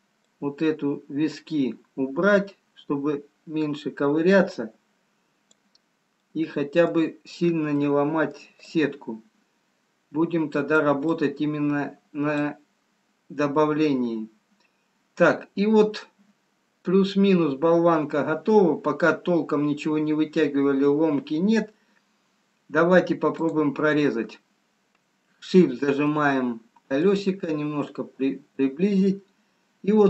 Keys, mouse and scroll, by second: 0.6 click, 5.9 scroll down 2, 6.3 middle click, 7.9 middle click, 7.9 scroll up 1, 8.8 click, 11.3 click, 12.6 scroll up 2, 13.0-13.5 scroll down 1, 13.5 middle click, 24.5 click, 26.3 shift+middle click, 27.6-28.3 scroll up 3.